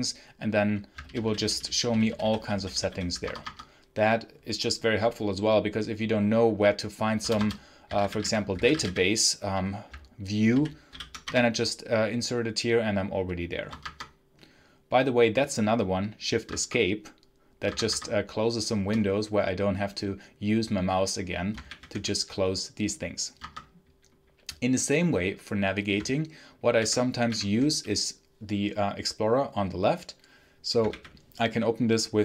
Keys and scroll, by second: 0.0-0.1 typing, 0.9 Down, 2.2 Up, 3.1 Escape, 7.5-9.2 typing, 10.4 Down, 10.8 Up, 11.1 Return, 13.7 shift+Escape, 16.3 shift+Escape, 17.5 shift+Escape, 21.6 alt+1, 23.3 Escape, 26.6 alt+1, 27.1 alt+1, 30.8 alt+1.